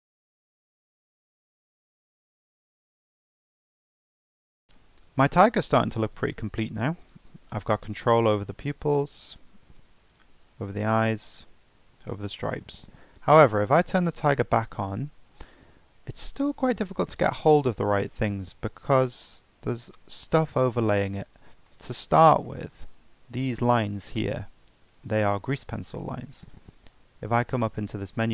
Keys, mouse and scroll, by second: 0.1 Tab, 0.2 scroll up 2, 0.3 click, 0.6 click, 0.9 Tab, 1.0 Tab, 1.1 click, 1.1 right click, 1.3 click, 1.4 Tab, 1.5 scroll down 3, 1.6 scroll up 1, 1.6 Tab, 1.7 right click, 1.9 shift+s, 2.0 Tab, 2.2 right click, 2.4 click, 2.5 Tab, 2.7 click, 3.2 Tab, 3.4 g, 3.7 Tab, 4.0-4.6 scroll up 7, 4.1 shift+middle click, 4.4 shift+middle click, 4.5 click, 4.6 shift+middle click, 4.7 scroll down 2, 5.1 scroll up 1, 6.1 click, 7.0 click, 7.2 g, 8.8 drag, 9.1 g, 10.1 click, 10.3 g, 11.3 click, 11.6 g, 14.1 click, 16.3 click, 16.7 click, 17.1 click, 17.8 click, 18.4 click, 20.5 drag, 21.0-21.4 drag, 21.4 scroll up 2, 21.6-22.0 shift+middle drag, 22.0 shift+scroll up 3, 22.4-22.7 shift+middle drag, 22.7-23.4 scroll up 3, 23.4 drag, 24.8 drag, 27.3-28.3 drag.